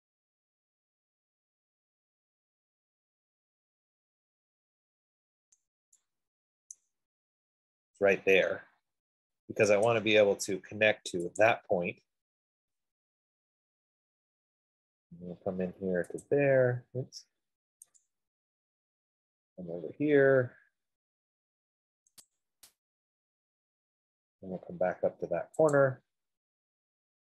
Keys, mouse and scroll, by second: 7.2 right click, 7.8 middle click, 8.0 middle click, 10.3 click, 11.6 click, 12.1 scroll up 3, 12.5-12.9 scroll down 3, 14.1 scroll up 2, 16.4 scroll down 1, 16.6 click, 18.2 click, 18.9 scroll up 4, 20.0 scroll down 3, 20.1-20.4 scroll, 22.7 click, 23.2 scroll, 24.1-24.6 scroll, 24.6 scroll down 7, 26.3 click, 26.8 scroll.